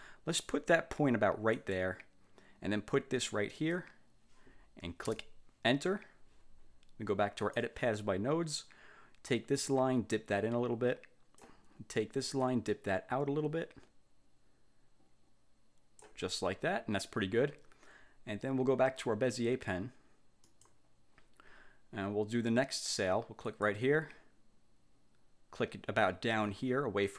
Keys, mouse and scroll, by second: 1.7 click, 3.7 click, 5.2 Return, 7.5 click, 9.7-11.7 drag, 12.6-16.3 drag, 20.6 click, 23.6 click.